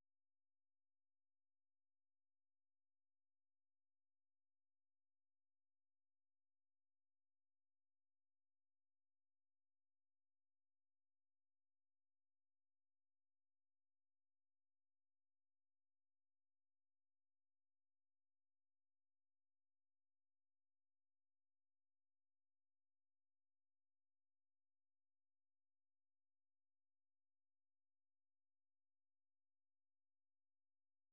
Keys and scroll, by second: 7.0-7.6 typing, 16.9-20.2 typing, 21.4 d, 22.0 d, 23.4 d, 25.0-26.9 typing.